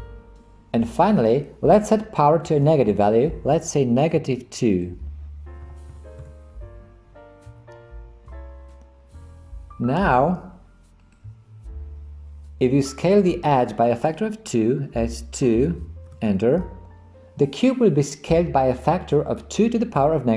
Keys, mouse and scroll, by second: 4.8-6.8 drag, 11.0 click, 14.7 s.